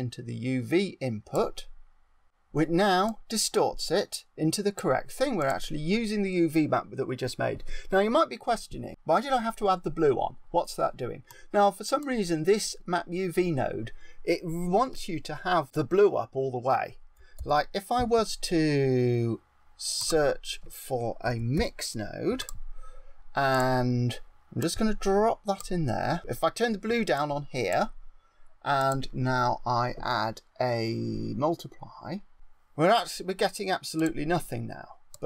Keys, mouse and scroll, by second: 3.0 click, 5.4 click, 11.3 click, 17.3 shift+a, 24.6 click, 26.1 click, 28.8 click, 33.9 click.